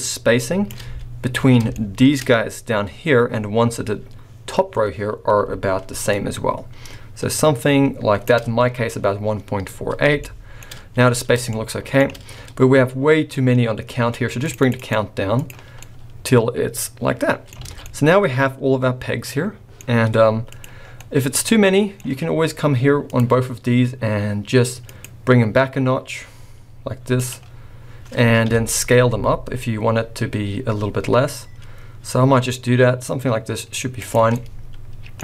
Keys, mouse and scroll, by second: 0.9 scroll up 2, 1.7 shift+middle click, 2.2 scroll up 1, 6.1 shift+click, 9.2-10.1 scroll down 4, 10.2 shift+middle click, 10.7-11.5 scroll down 6, 11.5 shift+middle click, 14.4-14.7 click, 15.3 click, 15.8 scroll up 1, 16.0 middle click, 17.6 alt+a, 17.9 middle click, 18.2 middle click, 19.8-20.4 scroll up 3, 20.4 click, 20.8 scroll down 3, 21.0 middle click, 23.0 click, 24.8 click, 27.1 click, 28.5 KP_1, 29.1 s, 34.3 middle click.